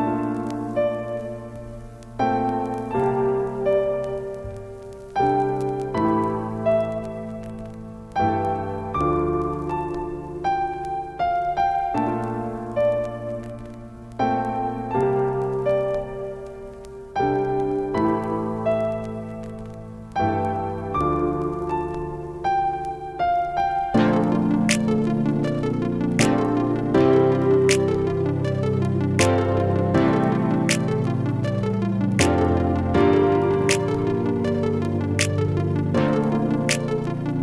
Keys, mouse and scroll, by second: 1.7-3.0 typing, 7.4-8.2 scroll down 1, 8.2 click, 9.3-10.4 typing, 10.4-23.3 drag, 29.8 space, 30.8-37.4 ctrl+drag.